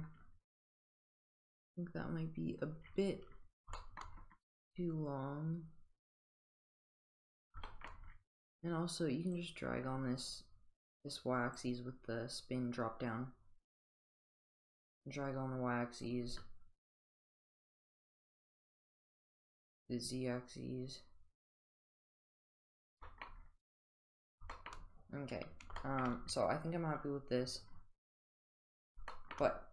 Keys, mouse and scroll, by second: 3.8 shift+middle click, 5.1-7.2 drag, 9.4-11.6 drag, 11.6 click, 13.6-16.0 drag, 17.4-18.9 drag, 19.6-22.3 drag, 23.0 shift+middle click, 24.5 shift+middle click, 25.8 shift+middle click.